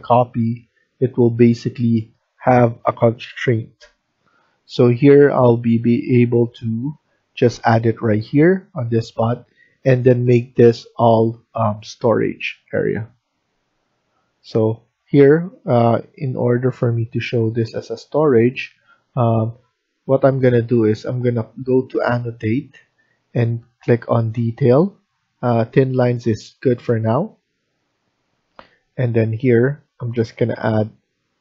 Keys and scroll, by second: 9.2 Escape, 9.7 Escape.